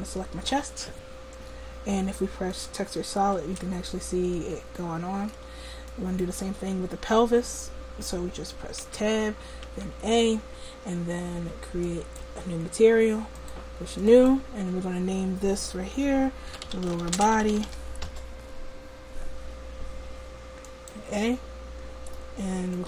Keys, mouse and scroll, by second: 3.5 Tab, 8.8 Tab, 9.7 a, 11.9-22.8 drag.